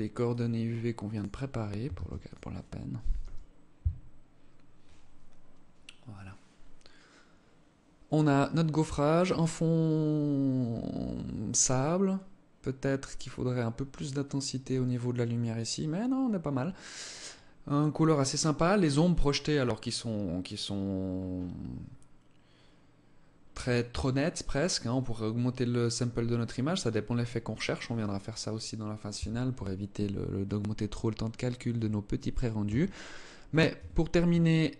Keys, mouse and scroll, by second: 1.5 ctrl+s, 32.2 Escape, 32.8 scroll up 2, 33.2 scroll down 1, 33.4 Tab, 34.0 alt+click.